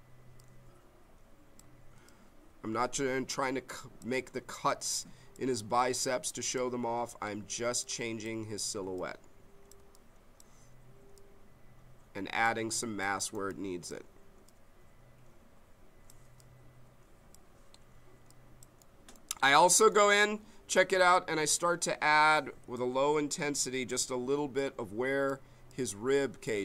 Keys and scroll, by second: 22.6 m.